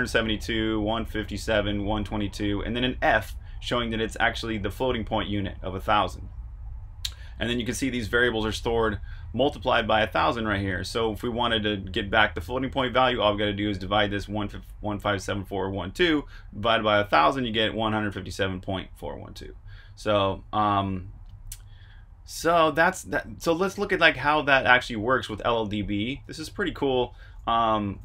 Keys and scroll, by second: 23.7 super+Tab, 24.4 super+Tab.